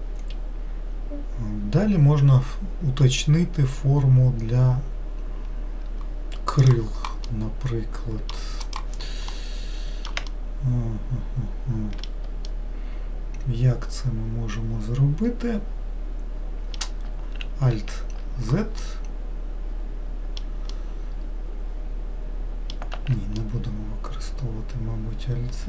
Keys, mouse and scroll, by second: 6.6 click, 7.2-15.6 middle drag, 17.7 alt+z, 18.8-22.9 middle drag, 22.9 alt+z, 23.4-25.6 middle drag.